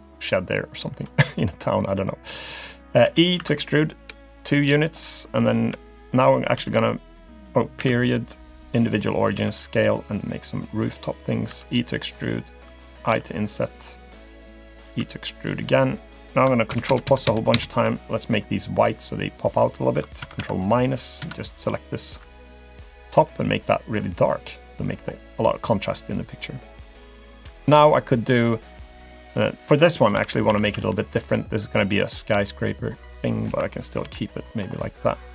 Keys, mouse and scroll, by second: 1.9 middle click, 3.1 e, 4.8 scroll up 1, 5.7 e, 6.6 s, 9.3 s, 11.5 e, 13.1 i, 15.0 e, 16.7-17.3 ctrl+KP_Add, 17.5 ctrl+KP_Add, 18.9 g, 20.2 ctrl+KP_Subtract, 20.4 ctrl+KP_Subtract, 21.2 ctrl+KP_Add, 23.1 g, 24.9-25.3 scroll down 1, 25.3-26.3 scroll up 1, 26.3 scroll up 1, 26.5-27.0 scroll down 2, 27.3 click, 28.3 middle click, 30.1 KP_7, 30.5 a, 30.6 a, 30.9 b, 33.5 KP_Decimal, 34.0 KP_3, 34.7 scroll down 1, 34.9 middle click.